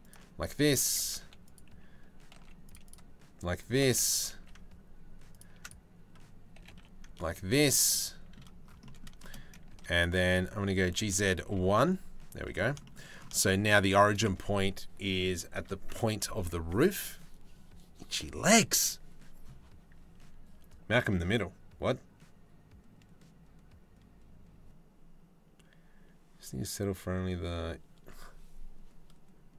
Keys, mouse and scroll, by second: 0.6 2, 0.8 3, 1.1 click, 2.0 z, 3.4 g, 6.2 g, 9.3 z, 10.5 g, 12.4 shift+middle click, 13.0 shift+middle click, 14.0 Tab.